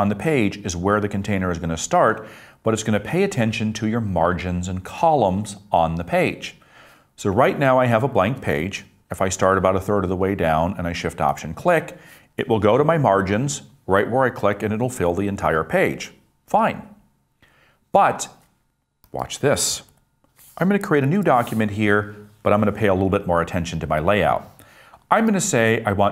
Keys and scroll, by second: 20.1 BackSpace, 21.1 super+n.